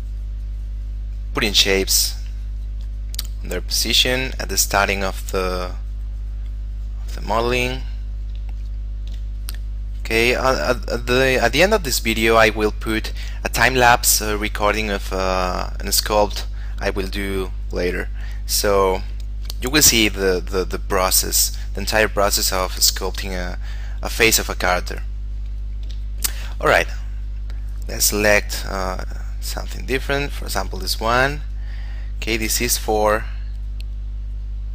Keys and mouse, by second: 0.6 click, 8.8 shift+middle click, 9.5 click, 23.5 click, 26.3 shift+middle click, 27.4 click, 30.6 click, 31.1 f, 31.7 click, 32.7 f, 33.4 click.